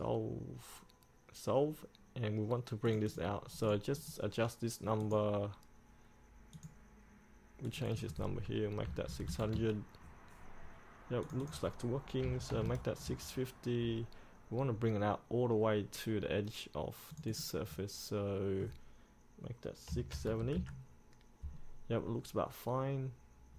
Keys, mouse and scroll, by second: 9.0 KP_6, 9.2 KP_0, 11.4 click, 12.4 KP_6, 17.3 click, 20.1 KP_6.